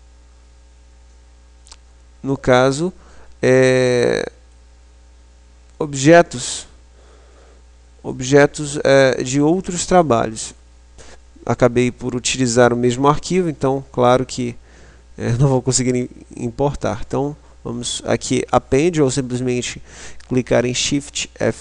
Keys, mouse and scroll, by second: 0.0 click, 1.3-13.3 middle drag, 15.8 click.